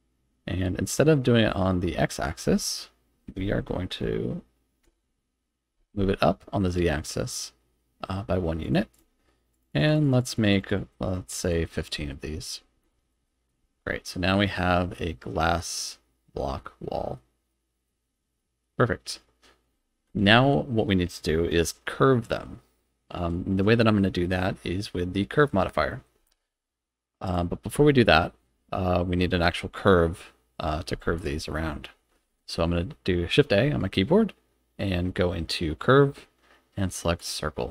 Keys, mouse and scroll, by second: 2.3-5.8 drag, 3.6 Tab, 8.6 click, 8.9 click, 9.5 click, 9.7 click, 9.9 click, 10.0 click, 10.2 click, 10.3 click, 10.5 click, 10.7 click, 11.1 click, 11.4 click, 12.1 middle drag, 12.5 scroll down 2, 12.9 shift+middle drag, 13.3 middle drag, 13.6 z, 14.6 middle click, 15.8 middle click, 16.6 middle click, 17.5 middle click, 18.4 middle drag, 18.6 click, 19.7 z, 27.3 click, 27.9-29.1 middle drag, 31.2 click, 32.2 shift+a.